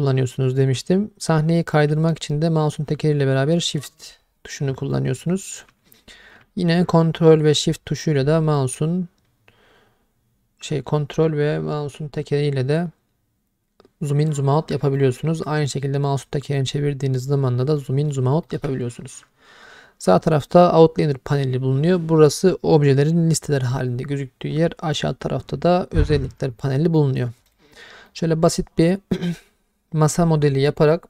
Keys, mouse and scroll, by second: 2.1-5.6 shift+middle drag, 7.0-15.0 ctrl+middle drag, 15.6-16.3 scroll down 4, 16.4-17.1 scroll up 5, 17.1-17.8 scroll down 3, 17.8-18.1 middle drag, 18.5 shift+middle click, 27.0 middle click, 27.5 click, 28.1-30.6 middle drag.